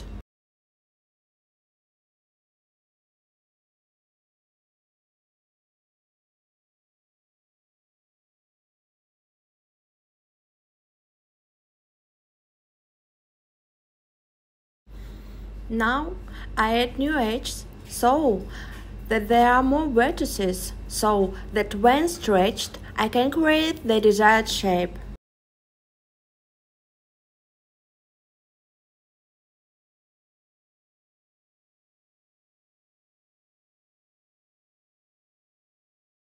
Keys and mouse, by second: 2.2 Tab, 4.3-4.6 drag, 5.1 Tab, 7.0 super+z, 7.3 super+z, 8.3 click, 10.6-11.1 drag, 11.7 Tab, 13.1 click, 13.4 x, 15.6 click, 16.4 click, 17.1 click, 18.2 click, 18.7 click, 26.8 super+z, 27.1 super+z, 27.4 super+z, 27.7 super+z, 28.5 click, 29.3 click, 29.9 click, 30.6 click, 32.2 click, 32.7 click, 34.0 click.